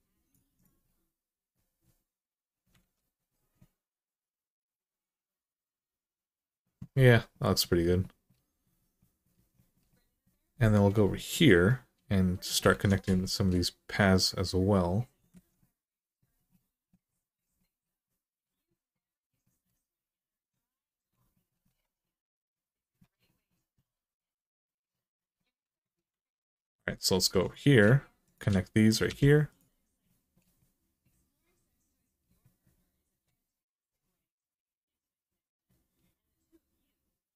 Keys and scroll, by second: 2.6 alt+z, 12.5 alt+z, 15.1 alt+z, 25.9 alt+z, 27.0 2, 28.8 f.